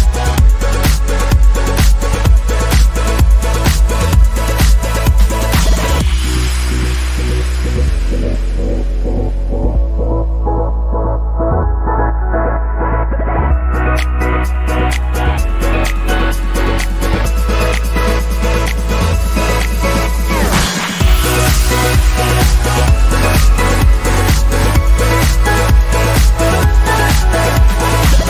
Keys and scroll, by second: 23.5 Up, 23.5 Up, 23.7 Up, 24.4 Down, 25.0 Down.